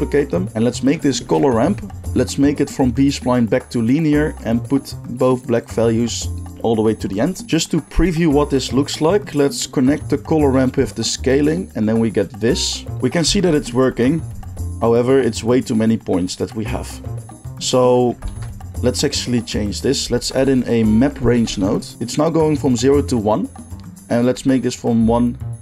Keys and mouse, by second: 2.8-7.4 drag, 7.4-9.8 middle drag, 7.4 g, 9.8-21.9 drag, 13.3 alt+z, 18.2 alt+z, 20.2 shift+a, 21.9-24.5 middle drag, 24.5-25.6 shift+drag.